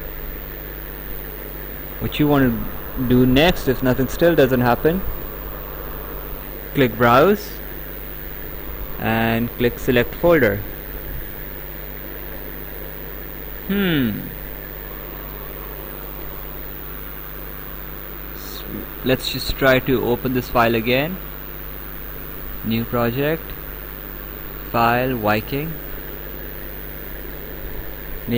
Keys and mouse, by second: 1.0 click, 6.1 click, 10.1 click, 15.3 click, 17.5 click, 23.9 click, 25.4 click.